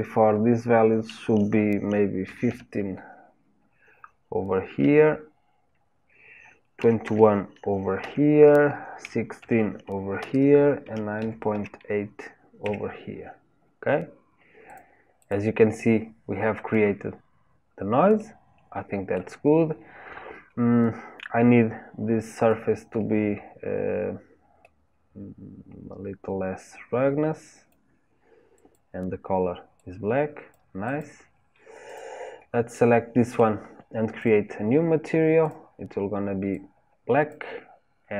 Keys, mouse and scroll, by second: 14.7 click, 15.3 click, 18.2-22.6 middle drag, 22.6-28.7 drag, 31.0 click, 32.7-34.3 middle drag, 34.3 click, 36.5 click.